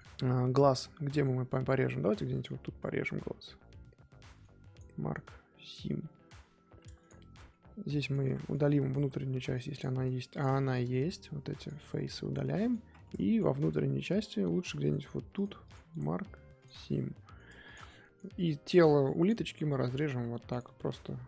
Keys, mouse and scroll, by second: 1.5 scroll up 2, 1.8 typing, 2.3 alt+click, 2.8 scroll down 1, 3.0-4.7 middle drag, 4.7-6.0 right drag, 6.0 middle click, 6.8 Tab, 7.0 click, 7.1 scroll up 2, 7.3 Tab, 7.5 middle click, 8.2 z, 8.3 middle click, 8.6 scroll up 2, 9.0 3, 9.7 click, 10.3 shift+click, 10.6 shift+middle click, 10.9 x, 12.5 middle click, 12.8 z, 13.0-15.0 middle drag, 15.0 2, 15.3 click, 15.6 click, 15.9 right click, 16.8 scroll down 4, 17.0 middle click, 17.5 Tab, 17.6 click, 17.8 middle click, 18.2 Tab, 19.2 alt+click, 19.7 middle click, 20.0 z, 20.5-21.2 right drag.